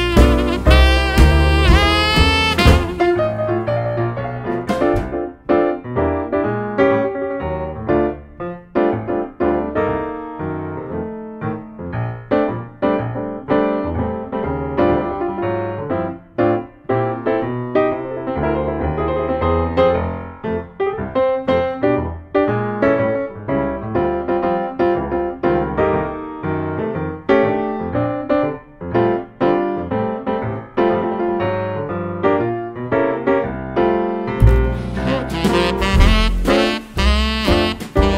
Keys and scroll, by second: 14.0 super+c, 14.1 super+v, 28.2 ctrl+d, 29.1 super+d, 30.7 ctrl+d, 31.6 super+d, 32.2 super+d.